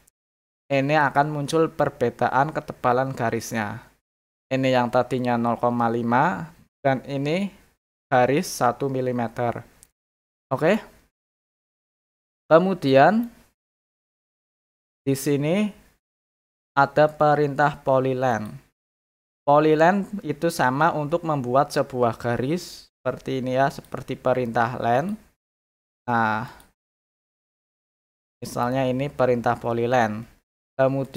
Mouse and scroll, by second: 9.8 middle click, 11.0 scroll up 2, 11.4 scroll down 2, 12.9 middle click, 14.6 middle click, 15.0 scroll up 1, 15.3 scroll down 2, 18.3 click, 23.7 click, 25.0 click, 26.4 click, 27.7 click, 28.3 middle click, 28.3 scroll up 1, 28.4 middle click, 31.0 click.